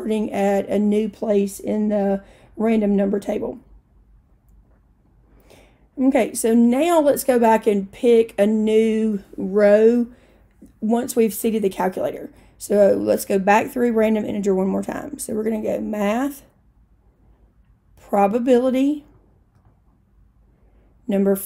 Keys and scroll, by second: 18.6 Right, 19.1 Right, 20.0 Right.